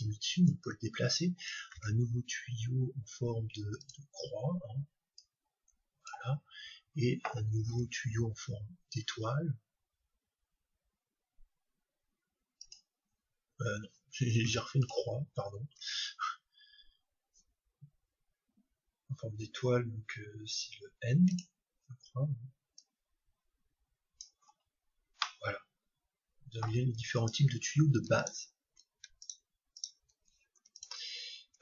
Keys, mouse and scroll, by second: 1.7 shift+a, 5.2-7.0 drag, 6.5-8.5 middle drag, 7.7 shift+a, 15.8 shift+a, 22.8-24.6 drag, 24.6-25.2 scroll down 1, 25.2-27.0 middle drag, 30.8 right click.